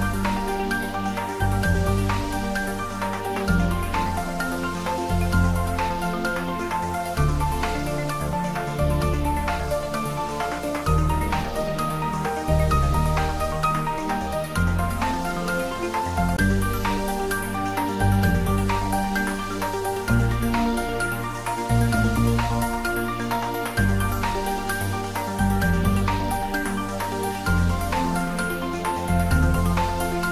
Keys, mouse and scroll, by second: 2.9-4.7 drag, 6.9 Tab, 7.7 click, 10.1 middle click, 11.3 click, 12.3 3, 13.2 click, 15.0-19.1 middle drag, 21.0-21.4 scroll up 1, 21.9 click, 24.1 click, 25.7-28.5 typing.